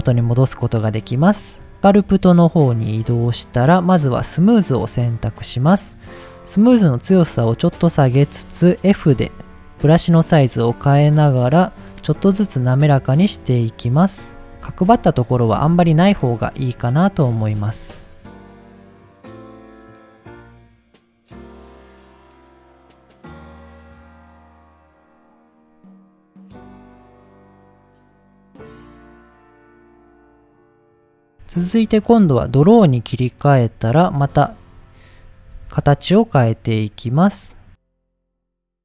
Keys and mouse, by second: 0.8 click, 1.5 click, 1.9 click, 4.3 click, 6.8-7.8 drag, 10.7-12.3 drag, 13.1 click, 13.8 click, 14.7 click, 15.8 ctrl+z, 16.1 click, 16.6 click, 17.0 click, 17.6 click, 17.8 click, 18.0 click, 18.5 click, 18.9 middle click, 19.0 click, 19.2 click, 19.6 middle click, 19.8 click, 20.3 click, 20.7 click, 21.0 click, 21.2 middle click, 21.4 click, 21.8 middle click, 21.9 click, 22.0 click, 22.5 middle click, 22.6 click, 22.8 click, 23.2 click, 23.5 middle click, 23.9 click, 24.3 middle click, 24.5 middle click, 24.8 middle click, 25.0 click, 25.2 click, 25.5 click, 25.8 middle click, 26.0 click, 26.1 click, 26.3 click, 26.5 middle click, 26.6 click, 26.9 click, 27.2 click, 27.4 click, 27.7 click, 28.2 click, 28.5 middle click, 28.7 click, 28.9 middle click, 29.2 click, 29.7 click, 29.9 click, 30.1 middle click, 30.2 click, 30.4 click, 30.6 click, 30.8 click, 32.8 click, 33.6 middle click, 34.7 click, 35.6 ctrl+z, 35.9 click, 36.6 click, 37.4 click, 37.7 click, 38.2 middle click, 38.4 click, 38.6 click.